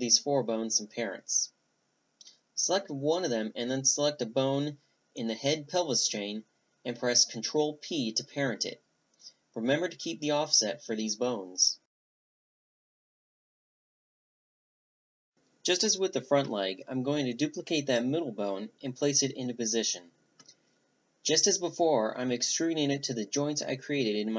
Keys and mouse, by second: 0.2 a, 0.4-1.6 right drag, 1.2 ctrl+p, 2.0-3.0 middle drag, 3.4 middle click, 4.6-5.6 middle drag, 5.1 a, 5.3-6.8 right drag, 6.2 ctrl+p, 6.8 click, 7.1 ctrl+p, 7.2 a, 7.5-9.1 drag, 8.3 ctrl+p, 9.4-10.5 middle drag, 9.6 a, 10.5 click, 11.3-12.4 middle drag, 13.0-15.3 drag, 15.2 shift+d, 15.3 middle click, 15.8 r, 17.2 s, 17.6 middle click, 17.7 g, 18.2-19.1 middle drag, 18.4 click, 19.1-19.6 right drag, 19.4 e, 19.5 click, 19.8 click, 20.2 drag, 20.4 middle drag, 20.6 g, 21.5-22.2 middle drag, 22.3 middle click, 22.4 right click, 23.9 middle click.